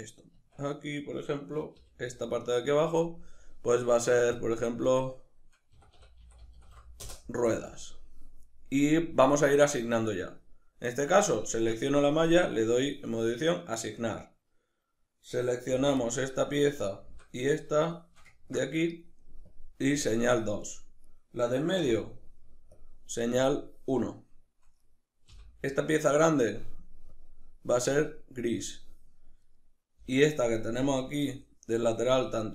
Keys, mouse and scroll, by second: 0.3 Tab, 1.0 right click, 1.8 l, 3.3-15.3 drag, 7.1 Return, 15.3 right click, 15.7 l, 16.1-19.5 middle drag, 17.1 l, 19.5 click, 19.9 click, 21.1 right click, 21.8 l, 22.7 drag, 23.4 click, 24.8 right click, 25.3 l, 27.1 click, 28.6 click, 29.4 right click, 30.0 l, 31.2-32.5 middle drag.